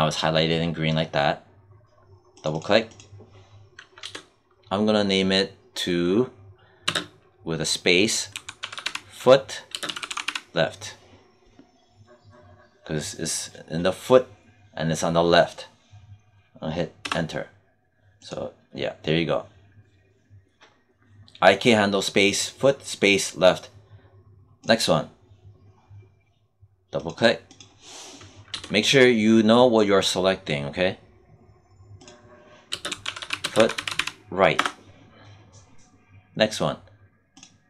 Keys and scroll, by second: 3.9 BackSpace, 6.7 space, 8.2 f, 9.6 space, 9.7 l, 16.9 Return, 28.4 BackSpace, 32.6 space, 32.8 f, 33.3 space, 33.4 r, 34.4 Return.